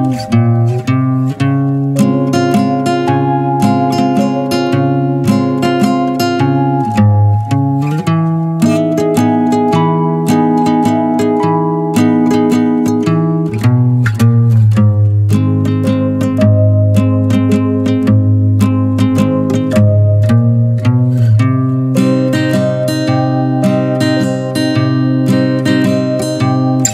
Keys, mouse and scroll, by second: 1.5 Tab, 2.1 Tab, 2.4 drag, 3.9-5.1 drag, 5.1 ctrl+z, 6.8 middle click, 7.1 drag, 7.4-8.4 middle drag, 8.4 click, 8.9 n, 10.0 click, 10.5 click, 13.4 click, 13.7 click, 14.6 click, 14.9 Tab, 15.5 click, 15.9-16.9 shift+middle drag, 16.9 shift+click, 17.4 shift+click, 18.3 click, 18.9 shift+click, 19.4-20.4 middle drag, 20.4 e, 21.5 middle click, 21.9 e, 22.6 middle click, 22.9 ctrl+z, 23.2 shift+click, 23.7 shift+click, 24.2 alt+s, 25.6 e.